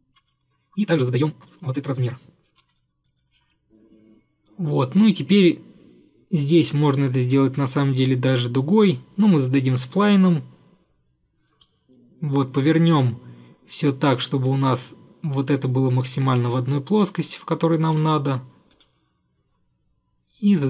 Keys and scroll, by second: 2.6 =.